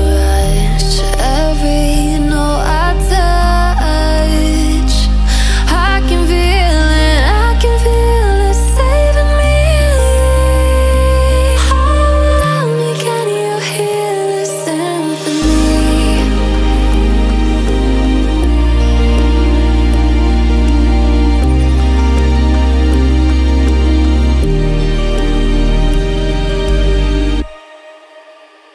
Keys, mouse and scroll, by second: 2.2 alt+scroll down 1, 2.6-2.9 alt+scroll up 1, 2.9 click, 3.3-3.7 alt+scroll up 1, 3.7 click, 5.2-6.8 drag, 6.8 BackSpace, 7.9-9.1 drag, 9.1 BackSpace, 10.4 click, 10.9 BackSpace, 11.5 alt+scroll down 1, 12.2 click, 12.8 alt+scroll up 1, 13.2 click, 14.0 ctrl+z, 14.4-16.1 drag, 16.1-18.9 alt+drag, 19.5 alt+scroll up 1, 20.1 click, 22.0 click, 22.6-23.5 scroll up 1, 23.5 click, 24.1 alt+scroll up 1, 24.5 click, 26.0 BackSpace, 26.7 alt+scroll down 1, 27.5 click, 28.1-28.4 alt+scroll up 1.